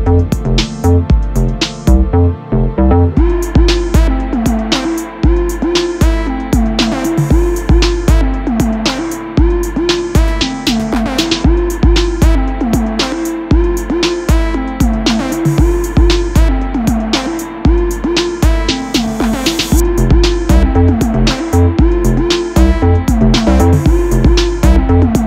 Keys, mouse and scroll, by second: 0.5 click, 0.8 middle click, 1.0 Tab, 1.2 click, 1.5 click, 1.8-4.4 middle drag, 3.4 shift+d, 3.6 Return, 4.1 Tab, 4.4 click, 5.1 Tab, 5.4 click, 6.1 1, 6.2 click, 6.5 shift+s, 7.3 Tab, 7.5 right click, 9.5-13.7 middle drag, 9.5 r, 10.2 KP_3, 10.7 r, 13.7 click, 14.6 KP_3, 15.2 r, 16.4-18.6 middle drag, 18.6 click, 18.8-20.9 shift+middle drag, 19.1 Tab, 19.8 e, 20.9 click, 21.0-22.1 middle drag, 21.4 ctrl+r, 22.0 Escape, 22.1 3, 22.1 click, 22.6 e, 23.0 click, 23.2-25.2 middle drag, 23.5 ctrl+z.